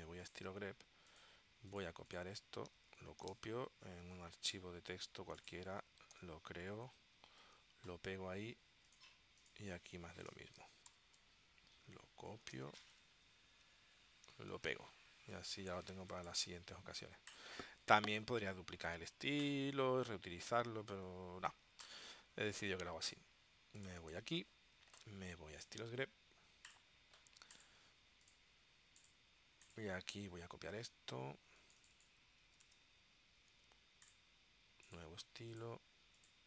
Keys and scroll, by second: 3.1 super+c, 3.4 super+Tab, 11.0 ctrl+alt+super+p, 12.5 super+c, 13.0 super+Tab, 14.7 super+v, 15.5 super+Tab, 30.1 super+Tab, 32.6 super+c, 32.8 Tab.